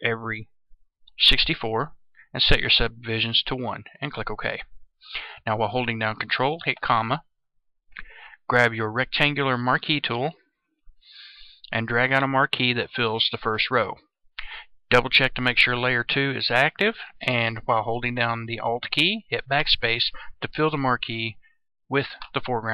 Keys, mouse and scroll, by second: 1.1 KP_6, 4.0 click, 8.7-13.7 drag, 19.5 alt+BackSpace.